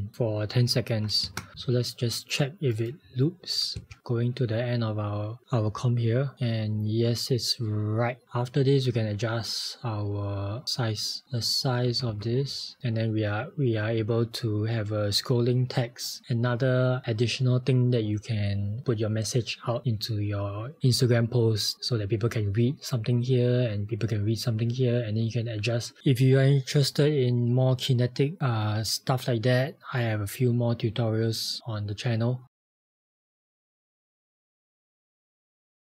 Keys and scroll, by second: 0.0-0.1 typing, 1.3 Return.